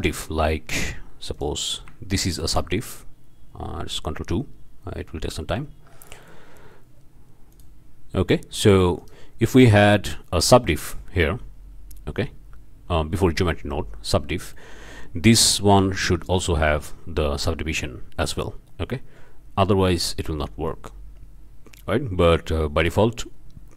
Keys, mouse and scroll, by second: 0.2-0.6 shift+drag, 0.7 shift+scroll up 2, 1.3-1.6 drag, 2.4 ctrl+2, 4.3 scroll down 2, 7.5 click, 8.2-8.7 drag, 9.0 click, 14.5-15.1 shift+drag, 15.7 click, 20.0 click, 22.8 click.